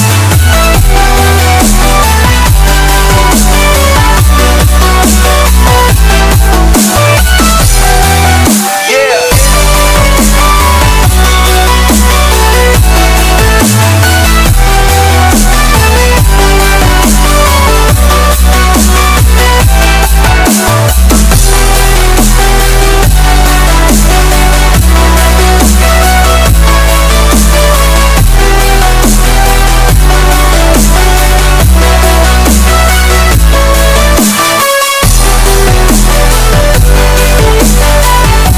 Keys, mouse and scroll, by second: 0.4 click, 0.7 scroll, 3.6 click, 6.1 click, 9.1 click, 13.4 click, 16.0 click, 22.3 click, 23.2-24.8 middle drag, 24.7 scroll down 1, 25.1 scroll up 1, 25.3-26.7 middle drag, 26.7 click, 28.4 click, 28.8 typing, 30.4 click, 30.4 typing, 32.1 click, 32.5-34.8 drag, 35.3 s, 37.0-38.5 drag.